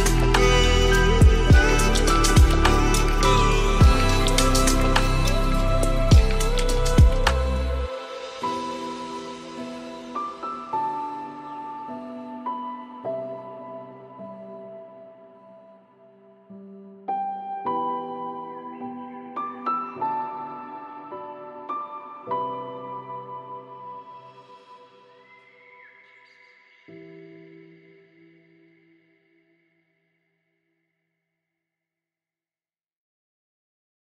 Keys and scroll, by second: 2.5 ctrl+alt+s, 13.3 ctrl+alt+s, 25.8 ctrl+alt+s.